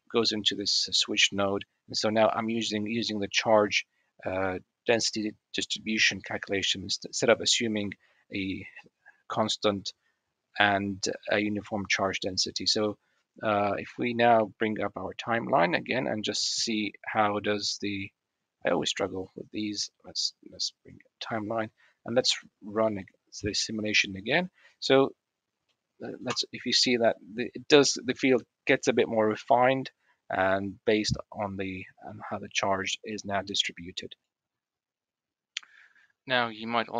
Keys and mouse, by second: 0.7 click, 2.0 click, 15.5 click, 18.3 click, 19.4 click, 25.2 middle click, 26.1 space, 32.9-34.2 middle drag, 36.2-36.9 middle drag.